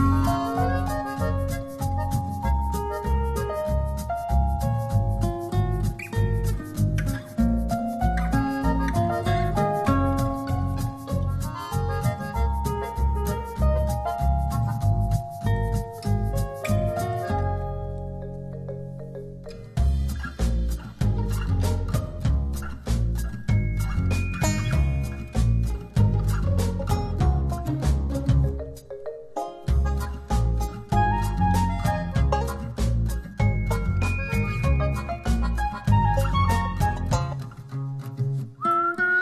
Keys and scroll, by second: 4.1 space.